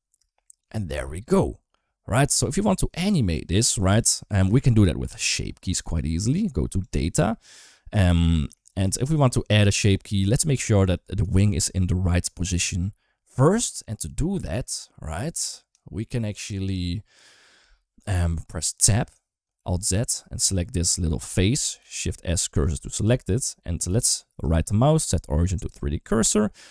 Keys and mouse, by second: 1.2 middle click, 3.4 middle click, 3.8 shift+middle click, 4.8 shift+middle click, 6.6 click, 8.1 middle click, 11.1 middle click, 18.1 middle click, 18.6 Tab, 19.4 alt+z, 21.6 shift+s, 22.9 Tab, 23.2 middle click, 23.7 alt+z, 24.1-25.6 right drag.